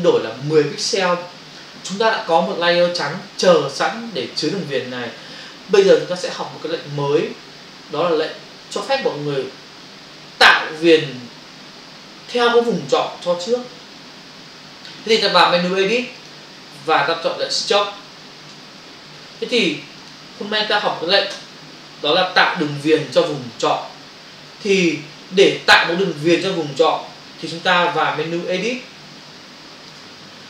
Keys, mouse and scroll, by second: 16.3 click, 19.9 click, 21.4 Return, 22.6 f, 26.3 ctrl+click, 28.6 b, 29.3 shift+click.